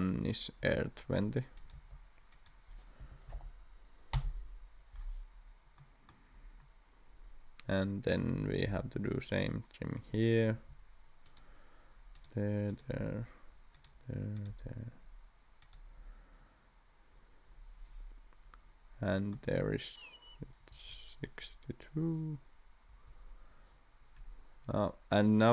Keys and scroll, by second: 1.7 d, 3.0 2, 3.3 0, 4.1 Return, 10.5 t, 20.7 Escape, 22.9 Escape.